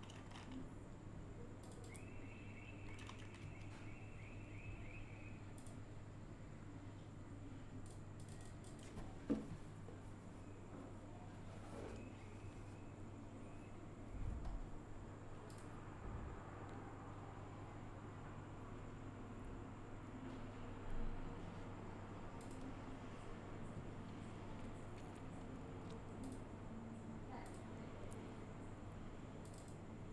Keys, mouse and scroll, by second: 1.6 F2, 3.4 F1, 5.6 click, 7.8 click, 15.5 click, 22.4 click, 26.2 click, 27.4 click, 29.5 click.